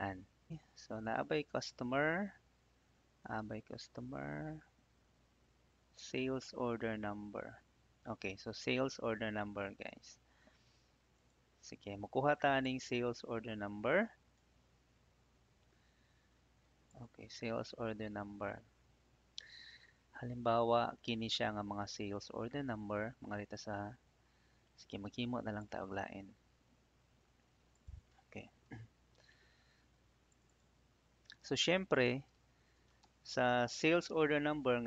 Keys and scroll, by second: 0.5 Tab, 2.3 Tab, 7.2 Tab, 18.3 ctrl+c, 29.3 ctrl+v, 32.3-34.6 typing.